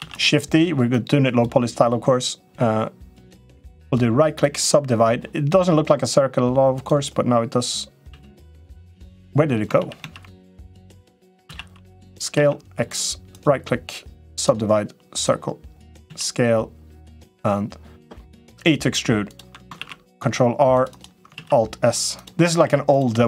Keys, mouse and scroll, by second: 0.7 click, 3.5 right click, 6.5 click, 7.9 s, 9.6 ctrl+z, 9.8 ctrl+z, 11.2 s, 13.1-14.3 right drag, 14.9 click, 15.9 s, 18.1 e, 19.5 ctrl+r, 21.2 alt+s, 22.6 3, 22.7 click, 23.1 shift+click.